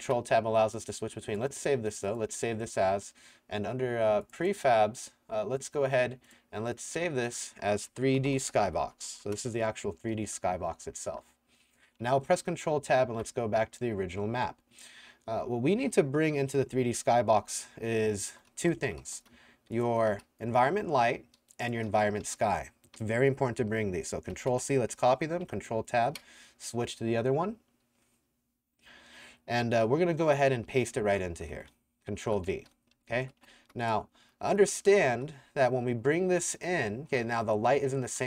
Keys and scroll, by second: 7.6-9.6 typing, 12.3 ctrl+Tab, 16.9-20.7 typing, 22.2 s, 24.3 ctrl+c, 25.5 ctrl+Tab, 31.0 w, 31.3 w, 32.3 ctrl+v, 32.7-37.9 typing.